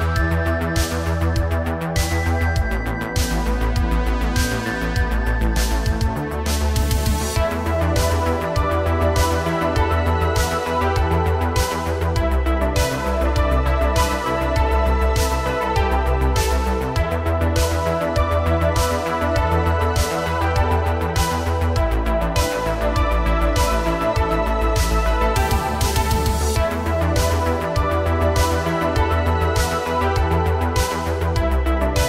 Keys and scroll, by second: 0.4 space, 4.3 ctrl+Tab, 5.5 alt+h, 7.8 a, 10.8 h, 12.5 space, 17.2 r, 17.6 z, 17.9 z, 22.1 ctrl+z, 22.7 r, 23.7 z, 23.9 z, 28.9 i, 31.5 ctrl+c, 31.7 ctrl+c.